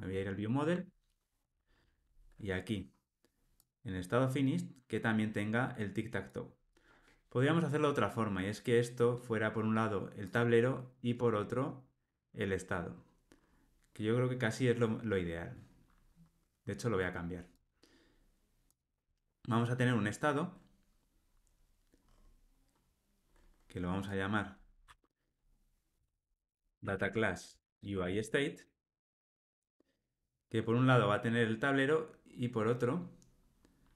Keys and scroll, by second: 1.4 super+b, 27.5 Tab.